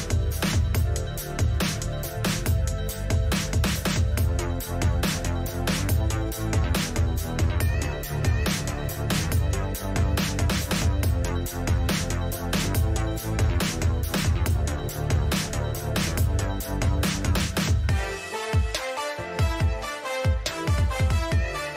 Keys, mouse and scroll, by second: 0.3 a, 0.5-6.0 middle drag, 8.6-10.4 middle drag, 17.1-20.5 middle drag.